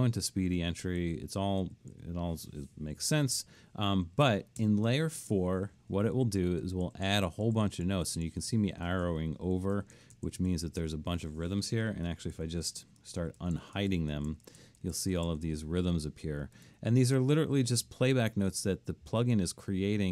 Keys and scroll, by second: 0.4 Right, 1.0 Right, 1.7 Left, 2.0 Left, 4.6 shift+Up, 5.9 Right, 6.2 Right, 6.4 Right, 6.6 Right, 6.9 Right, 7.1 Right, 7.3 Right, 7.5 Right, 7.7 Right, 7.9 Right, 8.1 Right, 8.3 Right, 8.5 Left, 8.7 Left, 8.9 Left, 9.1 Left, 9.2 Left, 9.4 Left, 9.6 Left, 9.8 Left, 10.0 Left, 10.2 Left, 10.4 Left, 10.8 Left, 12.1-15.1 typing, 12.3 Right, 12.8 Right, 13.2 Right, 13.6 Right, 13.9 Right, 14.3 Right, 14.6 Right, 14.9 Right, 15.3 Right.